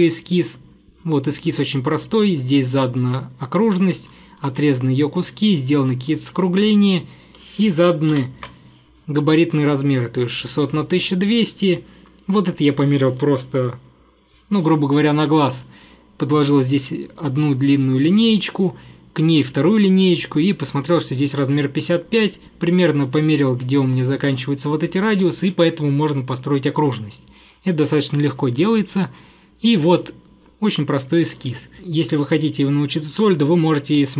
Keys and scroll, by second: 8.2 ctrl+8.